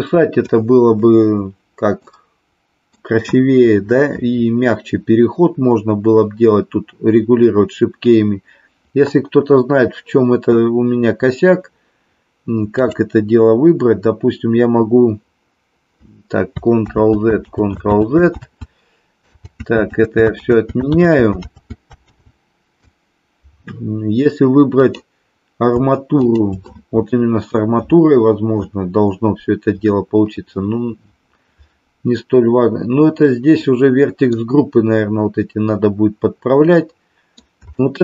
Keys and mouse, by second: 2.1-3.0 middle drag, 12.7 click, 17.1 ctrl+z, 17.6 ctrl+z, 18.1 ctrl+z, 18.6 ctrl+z, 19.5 ctrl+z, 20.5 ctrl+z, 21.0 ctrl+z, 21.5 ctrl+z, 22.2 ctrl+z, 26.1 shift+click, 33.7-34.5 middle drag, 36.8 middle click, 37.8 shift+middle click.